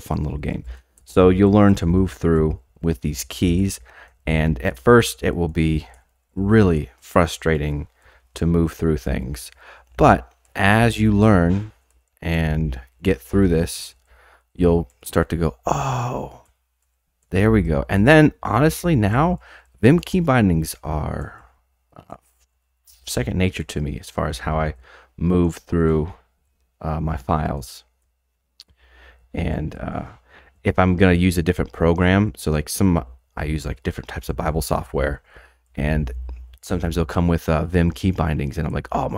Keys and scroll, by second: 0.3-39.1 typing.